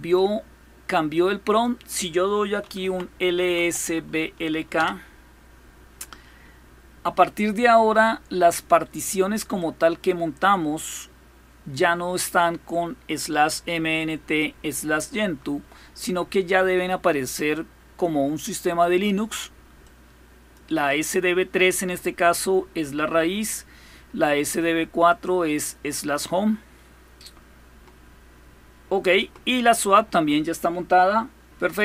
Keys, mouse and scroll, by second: 1.3 click, 2.2-4.1 typing, 4.5 Return, 9.4-12.0 drag, 12.1 click, 17.1 click, 19.6-20.9 drag, 24.9-26.4 drag, 30.8-31.5 scroll down 2.